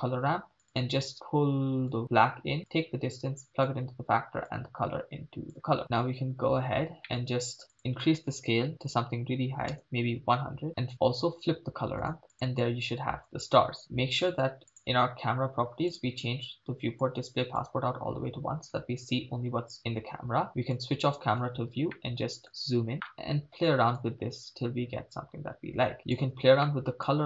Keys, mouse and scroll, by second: 1.1-1.9 drag, 2.7-3.7 drag, 4.5-5.8 drag, 5.8 middle click, 5.8-6.9 scroll up 5, 7.1 middle click, 7.7-9.9 drag, 9.9 0, 10.7 middle click, 12.0-12.3 drag, 14.7 click, 15.9 click, 16.2-17.0 scroll down 2, 17.0 click, 20.3 n, 20.7 click, 21.7 n, 21.9-22.4 ctrl+middle drag, 24.0 click, 26.6-27.1 middle drag.